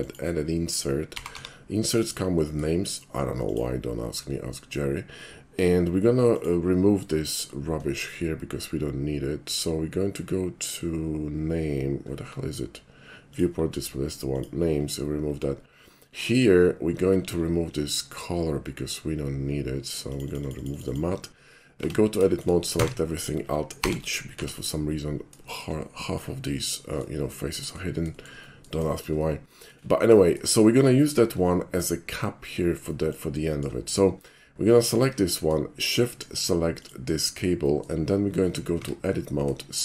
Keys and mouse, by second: 0.0 click, 1.2 g, 1.4 y, 2.1 click, 2.4 middle click, 3.5 click, 4.4-6.4 middle drag, 6.4 click, 7.3 middle click, 12.0 middle click, 12.4-13.4 middle drag, 13.4 click, 13.6 middle click, 14.4 click, 14.9 middle click, 15.1 middle click, 15.3 middle click, 16.3 click, 17.0 middle click, 17.2 middle click, 17.6 middle click, 20.1 click, 20.3 click, 20.4 click, 20.6 click, 20.7 click, 20.9 click, 21.8 Tab, 22.3 shift+middle click, 22.8 a, 23.9 alt+h, 24.3 Tab, 25.5 shift+middle click, 26.3-27.1 shift+middle drag, 27.6 shift+middle click, 28.2 middle click, 28.4-28.7 shift+middle drag, 28.9 shift+middle drag, 29.4 shift+middle click, 30.3 shift+middle click, 30.9-31.8 shift+middle drag, 32.9 middle click, 33.6 shift+middle click, 33.8 shift+middle click, 34.9 shift+click, 36.8 shift+click, 37.7 shift+middle click, 38.8 Tab.